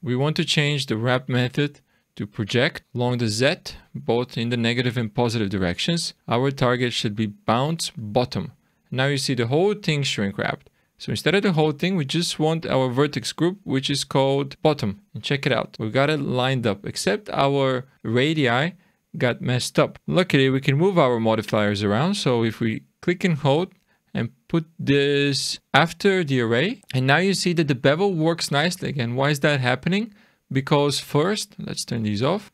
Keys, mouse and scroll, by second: 1.3 click, 3.0 click, 4.0 click, 6.3 click, 9.0-9.9 scroll up 6, 9.9-10.3 scroll down 2, 12.0 click, 15.1 scroll down 1, 15.3 middle click, 15.7-17.1 scroll up 2, 17.1-17.9 scroll up 1, 20.0 click, 23.0 click, 26.8-27.4 scroll down 3, 31.9 click, 32.4 click.